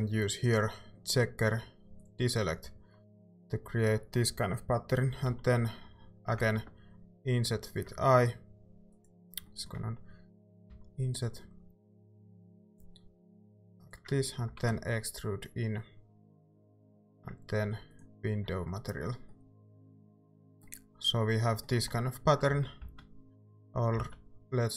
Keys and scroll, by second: 5.3 i, 10.7 i, 14.5 e, 18.5 Tab, 22.1 Tab, 22.5 ctrl+z, 22.8 ctrl+z, 23.4 ctrl+z, 24.0 ctrl+z.